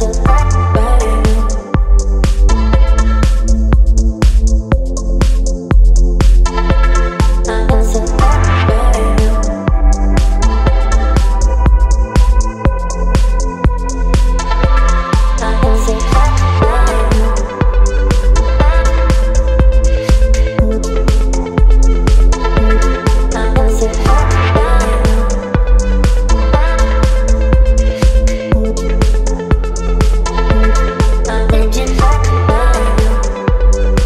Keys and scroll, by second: 3.5 Return, 4.0 space, 31.3 space.